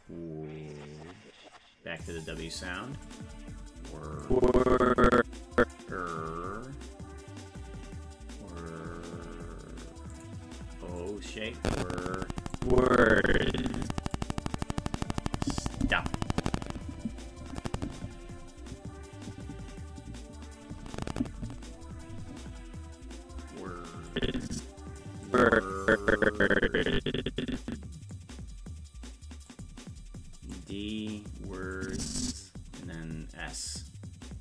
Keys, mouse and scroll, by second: 2.0 click, 3.1 click, 4.2-5.7 drag, 10.2 click, 11.0 click, 12.6-14.2 drag, 24.1 click, 25.3-28.1 drag, 29.5 click, 30.4 click, 31.8 click, 33.7 click.